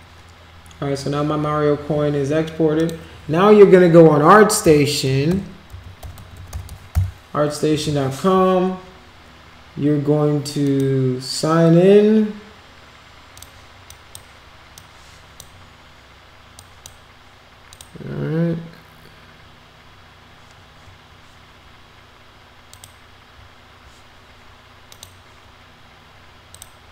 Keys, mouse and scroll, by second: 2.7 click, 4.7-7.1 typing, 7.7 Return, 10.6 click, 13.3 click, 13.9 click, 14.7 click, 16.5 click, 17.7 click, 22.7 click, 24.9 click, 26.5 click.